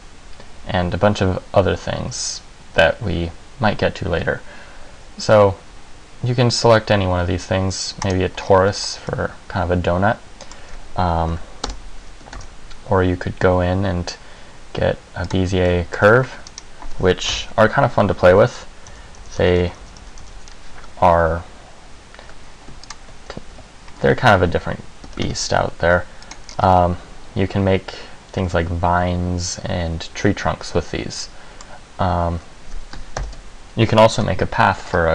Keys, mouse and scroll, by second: 8.5-9.5 scroll up 6, 9.3 middle click, 11.5 Delete, 12.5 shift+a, 15.8 middle click, 16.2 Tab, 16.7 right click, 17.5 KP_1, 19.1-21.3 typing, 23.0 ctrl+click, 23.7 g, 25.2 g, 26.5 click, 26.6 scroll down 3, 26.9 middle click, 33.3 ctrl+l, 35.0-35.1 scroll up 4.